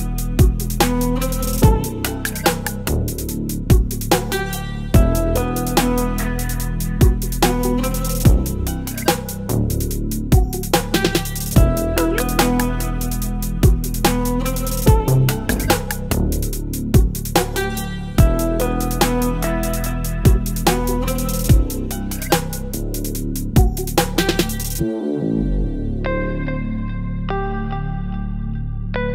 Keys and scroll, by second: 3.0 Return, 12.3 Delete, 17.1 Delete, 18.4 v, 18.9 ctrl+t, 22.2 space, 27.3 Return.